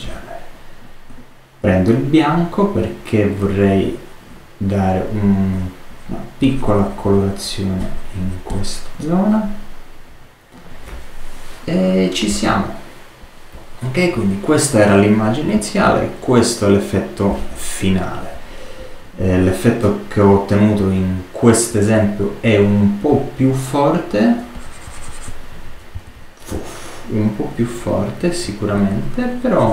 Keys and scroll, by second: 25.9 super+z.